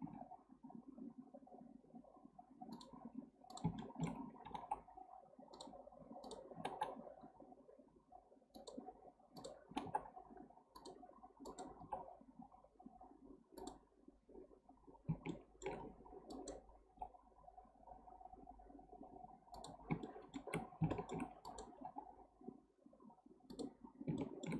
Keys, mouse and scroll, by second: 0.0 g, 3.5 click, 3.8 shift+middle click, 4.5 g, 6.2 click, 6.5 g, 9.4 click, 9.7 g, 11.5 click, 11.9 g, 14.8-15.3 scroll down 1, 15.3-16.3 shift+middle drag, 16.3 click, 16.9 g, 20.1 shift+middle click, 20.6 scroll up 1, 20.9-21.5 shift+middle drag, 21.5 click, 21.9 g, 23.9 scroll down 4, 24.2-24.5 shift+middle drag.